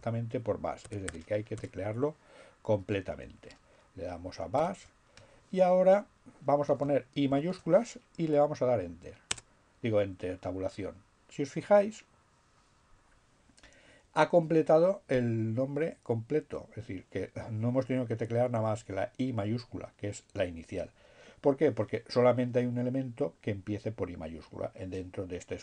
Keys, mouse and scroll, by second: 3.0 shift+7, 7.1 shift+i, 8.1 Tab, 23.9 BackSpace.